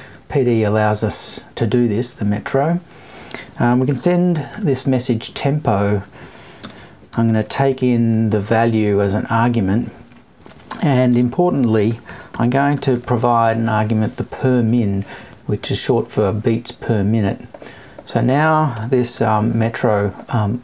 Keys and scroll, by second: 18.7 BackSpace.